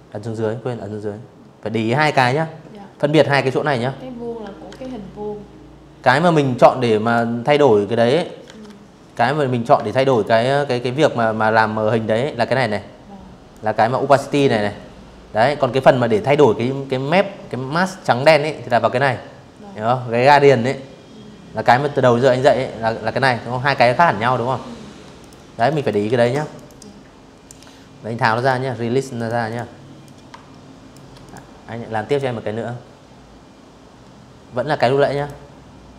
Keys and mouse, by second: 2.3 ctrl+1, 4.0 Escape, 4.7 click, 6.1 ctrl+1, 7.7 ctrl+click, 11.2 ctrl+click, 13.8-16.3 ctrl+drag, 21.7 Escape, 22.5 v, 22.9 click, 23.2 z, 23.3 click, 23.7 v, 23.9 click, 24.2 click, 26.0 click, 26.8 click, 27.1 click, 27.7 shift+click, 28.9 click, 29.7 click, 32.8 click, 33.9 click.